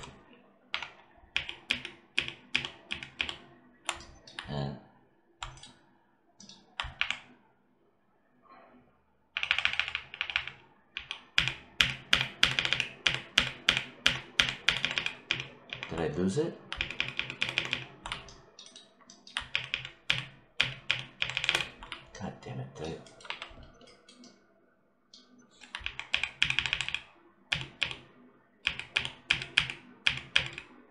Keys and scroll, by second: 0.5 q, 1.2 ctrl+z, 6.8 ctrl+y, 9.2 ctrl+y, 10.8 ctrl+z, 19.4 ctrl+z, 23.1 1, 25.7 ctrl+z.